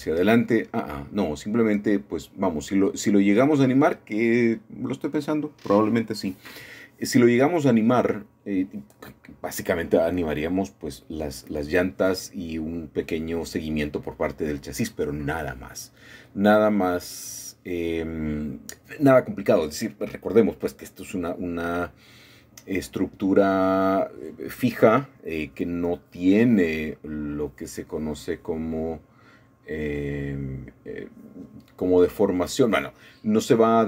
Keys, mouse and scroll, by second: 0.0-5.9 shift+middle drag, 6.5 shift+middle click, 7.7-8.8 shift+middle drag, 9.7-11.0 shift+middle drag, 12.4 click, 13.9 shift+middle click, 15.6-18.7 shift+middle drag, 19.2 shift+middle click, 19.6 shift+click, 20.6-22.2 shift+middle drag, 22.5-26.1 shift+middle drag, 28.5 click, 30.8 click, 31.5-32.3 scroll up 2, 32.3-32.8 scroll down 2, 33.7 shift+click.